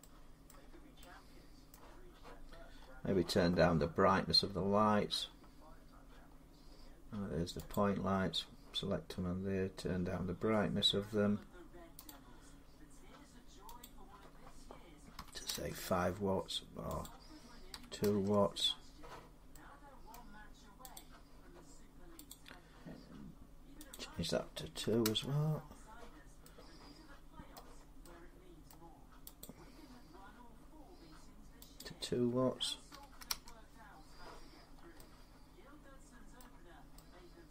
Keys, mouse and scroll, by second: 0.3 middle click, 0.4 scroll down 2, 0.5 scroll, 1.5 scroll, 2.5 scroll up 4, 4.1-5.2 scroll, 6.1-6.5 scroll, 7.5 click, 9.9 scroll down 6, 11.8 click, 12.5 middle click, 13.6 click, 14.9 5, 15.3 Return, 16.8 click, 17.5 2, 17.8-19.3 Return, 19.9 middle click, 20.8 click, 22.1 click, 23.7 click, 24.6 2, 26.9 Return, 27.3 middle click, 28.5 middle click, 29.2 click, 29.2 2, 31.6 click, 32.7 2, 34.4 scroll, 34.5 scroll up 4, 36.1 middle click, 37.4 middle click.